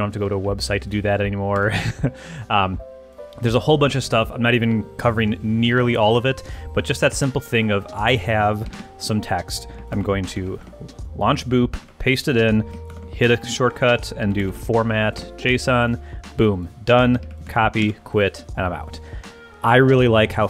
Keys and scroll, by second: 0.2 Up, 1.5 ⟲, 8.7 super+q, 9.8 alt+super+q, 9.9 alt+space, 10.3 alt+Up, 10.6 Return, 11.8 super+v, 12.9 super+b, 13.9-15.0 typing, 15.1 Return, 17.2 super+a, 17.5 super+c, 17.8 super+q.